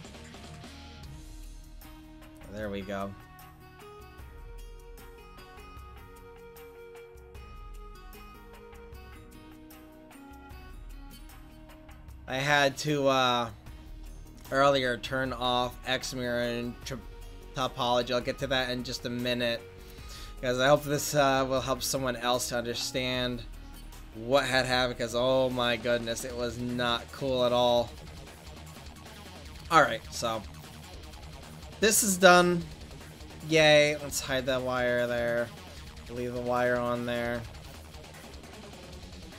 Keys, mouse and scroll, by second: 11.2-13.5 drag, 18.7 click, 19.9-23.6 drag, 25.0 r, 25.3 r, 32.9-39.3 right drag, 33.9-36.7 drag.